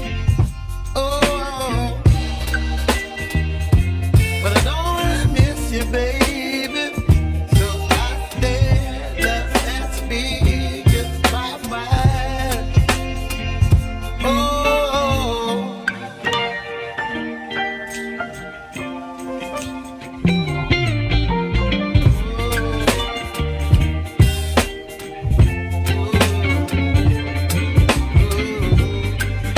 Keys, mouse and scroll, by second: 3.0 shift+middle click, 3.9 1, 5.6-6.3 scroll down 7, 6.3 click, 9.1 click, 10.1-11.7 shift+middle drag, 11.7 g, 17.0-18.4 middle drag, 18.4-18.9 scroll down 1, 18.9-21.4 middle drag, 22.2-22.6 scroll down 1, 23.5-25.4 shift+middle drag, 25.4 click, 27.2 a, 27.7-29.2 middle drag, 29.2 ctrl+click.